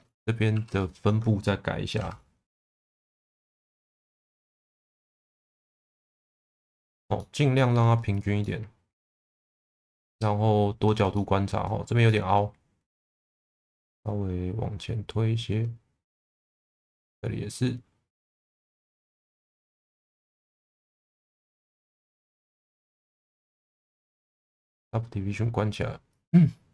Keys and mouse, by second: 0.5 2, 1.9 shift+v, 3.1 click, 3.8 1, 4.0 click, 4.3 shift+v, 4.9 click, 5.7 shift+v, 6.2 click, 6.5 middle click, 7.1 shift+middle click, 7.5 middle click, 8.4 alt+middle click, 9.3-10.8 middle drag, 11.1 shift+middle click, 12.0 shift+middle click, 13.1 click, 13.9 click, 16.7 click, 17.5 click, 18.5 middle click, 19.6 shift+middle click, 20.1-22.6 middle drag, 24.5 click, 26.1 click.